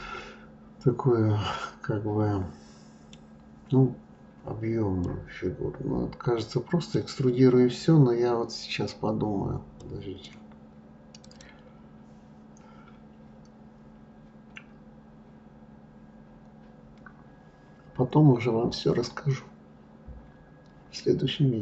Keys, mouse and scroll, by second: 5.5-8.5 middle drag, 9.6-10.2 scroll down 2, 10.2-13.2 middle drag.